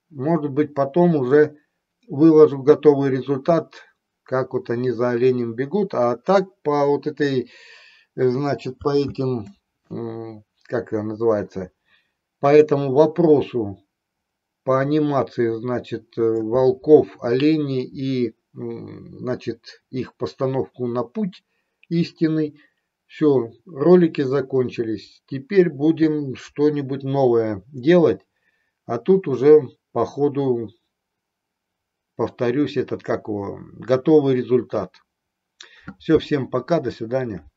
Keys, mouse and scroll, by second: 9.3 space, 12.7-16.6 drag.